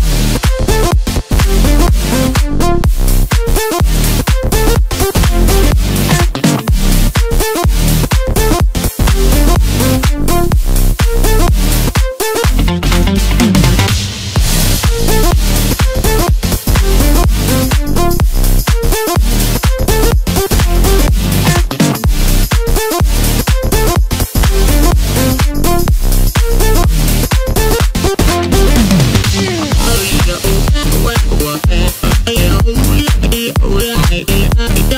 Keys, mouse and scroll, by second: 0.1-0.6 scroll up 1, 0.6-2.0 scroll down 1, 2.0 s, 5.3 KP_1, 6.1-6.7 scroll up 1, 6.7 e, 9.3 e, 11.0 s, 13.4 e, 17.6 e, 19.0 s, 20.3-20.7 scroll down 2, 20.7 middle click, 21.5 Tab, 22.7 ctrl+2, 24.0-25.1 right drag, 25.1-26.9 middle drag, 26.9 click, 27.9 click, 28.3-28.8 middle drag, 28.8-29.6 scroll up 2, 29.6 click, 30.0-30.9 scroll down 3, 30.9-32.3 drag, 32.6 middle click, 33.0 scroll up 1, 33.3 Tab, 33.8 middle click, 34.3 scroll down 1, 34.5 2.